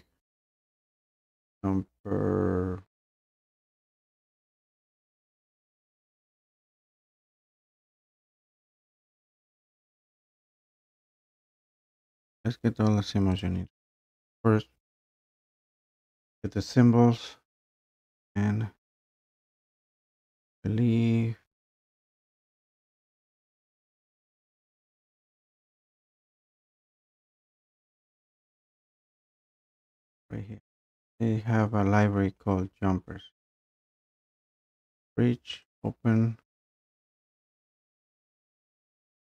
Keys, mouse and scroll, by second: 4.8 click, 5.1 click, 5.3 scroll, 5.4 scroll down 4, 5.5 scroll, 5.7 click, 6.9 click, 7.2-7.9 scroll, 7.9 click, 8.2 click, 8.2 click, 8.5 Escape, 9.0 click, 9.1 click, 9.2 click, 9.2 click, 10.1 click, 10.2 click, 10.4 click, 10.6 click, 10.8 click, 11.1 click, 11.8 click, 12.0 click, 13.4 click, 17.2 middle click, 18.1 middle click, 18.2-19.7 scroll, 20.4-23.9 scroll, 25.3 scroll, 27.4 scroll, 28.2-28.8 scroll, 29.0 scroll, 30.4 scroll, 30.8 scroll down 4, 32.7-33.1 scroll up 1, 33.1-34.2 scroll down 1, 35.7 click, 37.0 click, 37.3 click, 38.1 click, 38.9 click.